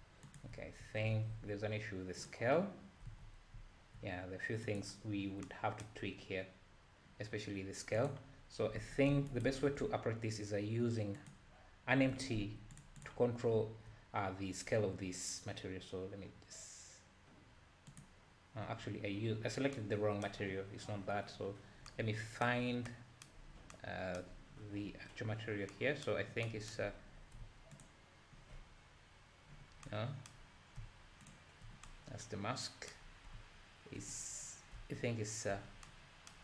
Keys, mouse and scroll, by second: 0.2 click, 0.5 `, 1.1 ctrl+a, 3.1 alt+a, 4.6 click, 8.0 click, 8.4-8.8 scroll down 1, 8.8 alt+a, 9.4 shift+right click, 9.5 shift+a, 12.1 g, 13.0 drag, 13.6 `, 18.0 click, 21.5-21.9 scroll down 5, 23.4-23.7 scroll down 3, 24.8-25.7 scroll up 5, 26.9-27.8 scroll up 6, 27.9 ctrl+shift+click, 28.6-29.4 scroll down 2, 31.3 ctrl+shift+click, 34.1-34.7 scroll up 4, 35.6 scroll down 4.